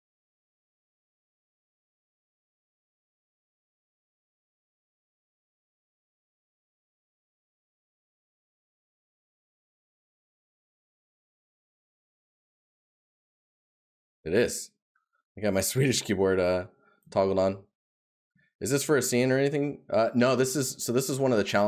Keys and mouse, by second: 5.4 right click, 14.9 right click, 18.2 right click.